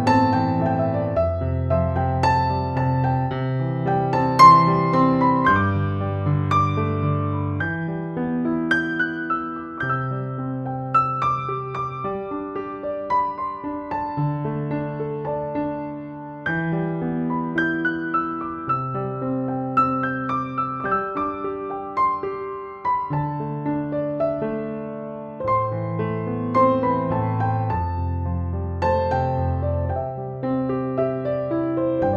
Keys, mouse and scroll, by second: 12.1 Down, 18.5 click, 22.9 Down, 25.6 Up, 26.7 Down.